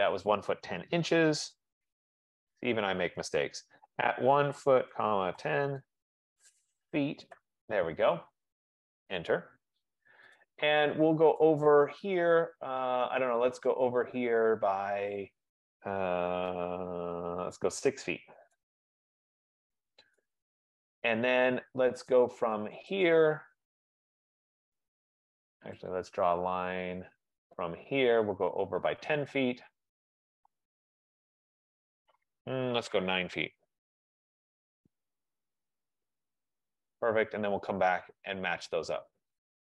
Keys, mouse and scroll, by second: 2.5 ctrl+z, 4.2-6.0 typing, 7.1-7.8 typing, 9.5 Return, 10.5 right click, 11.7 click, 18.2-18.6 typing, 20.0 Return, 22.1 right click, 23.2 click, 24.8 F15, 26.1 click, 27.0 click, 28.5 click, 30.5-30.9 typing, 32.0 typing, 33.3-35.6 typing, 35.7 Return, 38.8 click.